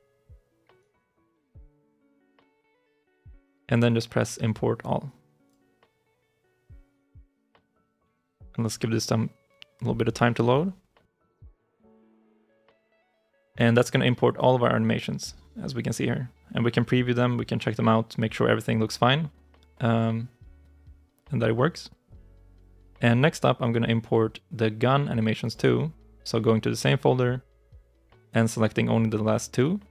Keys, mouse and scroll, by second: 13.2 ctrl+shift+s, 23.5 right click.